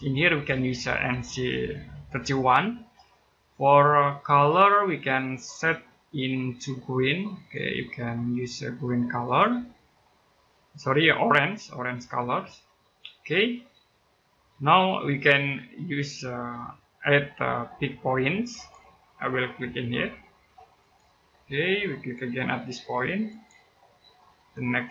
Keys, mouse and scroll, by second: 4.8 click, 12.6 click, 18.3 click, 23.1 click.